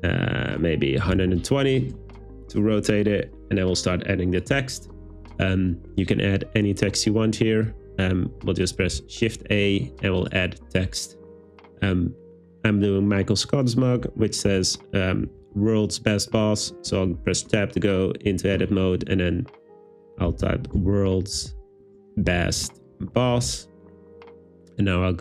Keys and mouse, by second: 0.4-1.3 typing, 1.8 Return, 9.0 shift+a, 14.5 w, 15.6 Tab, 16.7-17.5 typing, 20.3-23.4 typing, 21.9 Return, 22.7 Return.